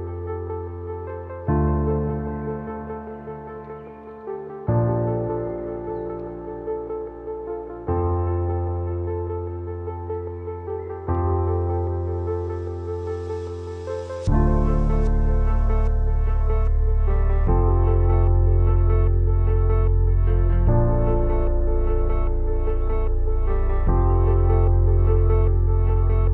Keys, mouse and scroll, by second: 0.9-6.5 drag, 8.2-14.7 drag, 20.6 click, 22.9-26.3 drag.